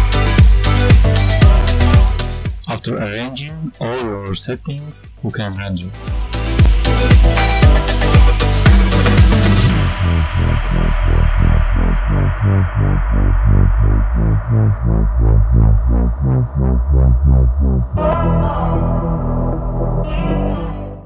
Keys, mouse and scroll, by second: 1.3 click, 6.5 click.